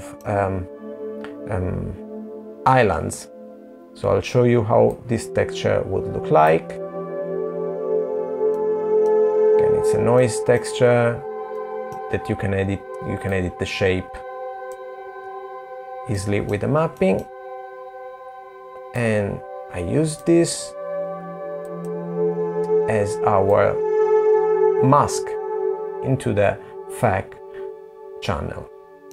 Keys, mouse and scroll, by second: 6.4 middle click, 7.3 middle click, 7.3 scroll down 2, 7.8 scroll up 5, 8.6 middle click, 9.3 scroll up 1, 10.0 middle click, 11.8 click, 13.8 super+z, 14.6 middle click, 15.4 middle click, 17.5 click, 22.6 middle click, 22.6 click, 22.6-23.0 scroll down 3, 27.7 middle click.